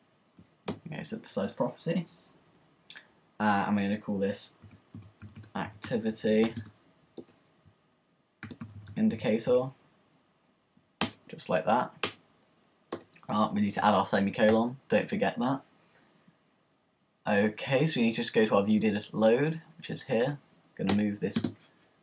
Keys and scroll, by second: 0.7 Return, 1.8 y, 4.7-6.5 typing, 7.8-9.8 typing, 12.0 Return, 14.5 typing, 15.8 typing.